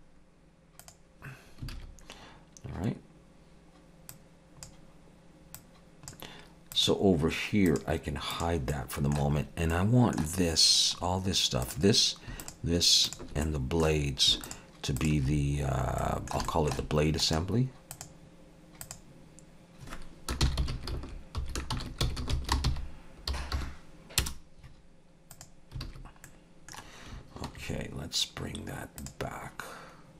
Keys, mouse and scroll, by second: 1.7 alt+a, 4.1 click, 5.6 click, 6.7 click, 7.7 click, 8.3 click, 8.7 middle click, 9.4 scroll up 2, 9.7 middle click, 11.0-11.3 scroll up 3, 11.7 click, 12.4 shift+click, 13.3 shift+click, 13.5 middle click, 14.5 shift+click, 15.3-15.9 scroll down 2, 16.0 middle click, 16.0 scroll down 1, 16.5 shift+middle click, 17.2 right click, 22.2 s, 25.9 alt+a, 26.3 middle click, 29.3 click.